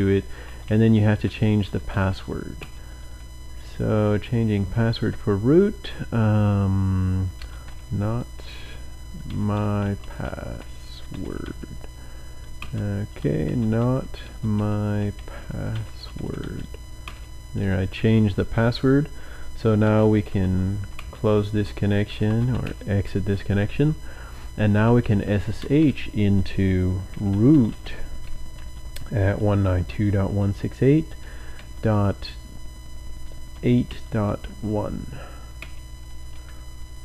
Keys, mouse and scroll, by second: 0.1-4.8 typing, 7.4 typing, 9.2-11.4 typing, 12.5-17.0 typing, 19.6-23.0 typing, 24.4-30.5 typing, 31.5-34.4 typing, 35.5 typing.